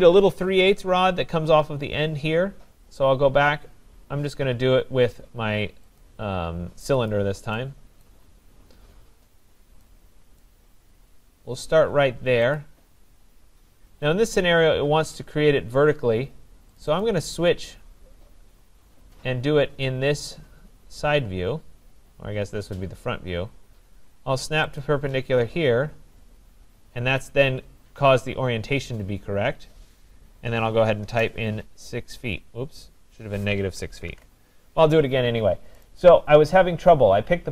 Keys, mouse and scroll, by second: 6.0 click, 7.1 click, 8.0 right click, 8.5-9.2 scroll, 10.4 right click, 10.8-12.1 scroll, 12.1 scroll, 12.6 click, 16.8 click, 17.0 click, 18.0-19.0 scroll, 19.0 scroll down 10, 19.5-20.2 scroll up 11, 20.7 scroll, 21.3-22.6 scroll, 24.8 click, 26.8 scroll, 28.1 scroll, 30.4-31.1 typing, 33.4 Return, 33.4 scroll, 34.1 ctrl+z, 35.9 right click, 36.4-37.1 scroll.